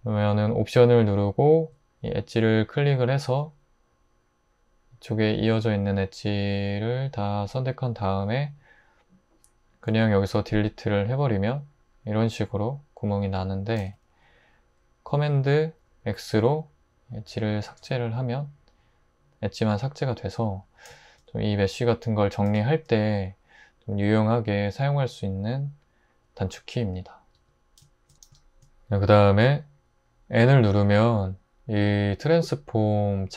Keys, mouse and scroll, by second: 9.9 x, 13.8 super+z, 17.7 super+x, 27.4 Tab, 30.4 n.